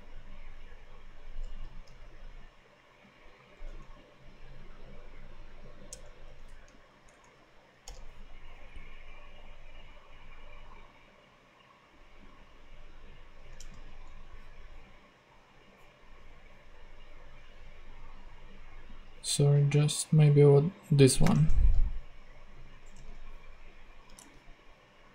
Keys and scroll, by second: 1.5 Return, 1.8 super+v, 5.8 alt+Return, 7.0 alt+Down, 7.8 Return, 13.5 super+Tab, 21.1 super+c, 21.3 super+Tab, 22.9 super+Tab, 24.1 super+Tab.